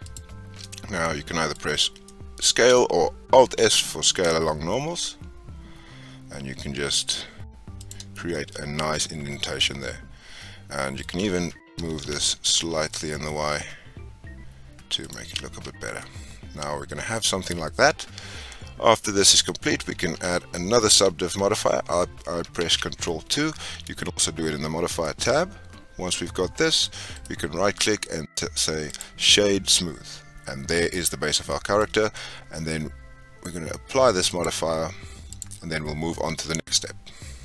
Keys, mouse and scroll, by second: 0.0 alt+shift+click, 0.6 middle click, 1.5-2.0 scroll up 4, 2.0-3.6 shift+middle drag, 3.6 alt+s, 8.0 scroll down 4, 8.3-11.4 middle drag, 11.7 g, 15.5 Tab, 15.8 scroll down 4, 15.9-19.0 middle drag, 22.6 ctrl+2, 24.8 scroll up 2, 25.0-27.1 middle drag, 27.1-29.3 right drag, 29.3 scroll down 1, 29.4-32.4 middle drag, 34.2-37.3 drag.